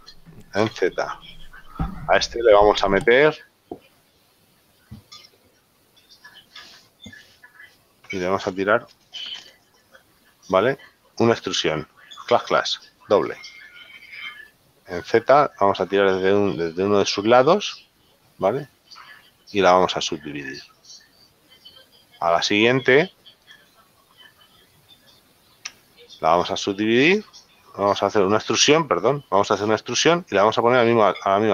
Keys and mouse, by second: 1.2 z, 1.9 shift+middle click, 4.6 click, 5.6 click, 6.2 middle click, 10.3 middle click, 22.7 click, 26.0 Tab.